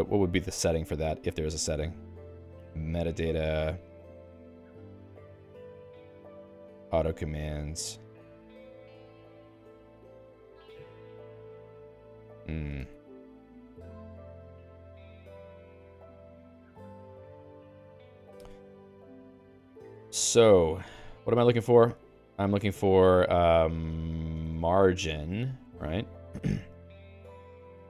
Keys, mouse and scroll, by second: 0.1-1.1 Down, 1.3 Down, 1.5 Down, 1.7 Down, 1.9 Down, 2.7 Down, 2.9 Down, 3.1 Down, 3.3 Down, 3.5 Down, 3.9 Down, 4.1 Down, 4.3 Down, 4.5 Down, 4.8 Down, 5.0 Down, 5.2 Down, 5.4 Down, 5.6 Down, 5.8 Down, 5.9 Down, 6.2 Down, 6.4 Down, 6.6 Down, 6.8 Down, 7.2 Down, 7.3 Down, 7.6 Down, 7.9 Down, 8.3 Down, 8.6 Down, 8.9 Down, 9.1 Down, 9.3 Down, 9.5 Down, 9.7 Down, 10.5 Down, 10.8 Down, 11.6 Down, 11.8 Down, 12.9 ctrl+g.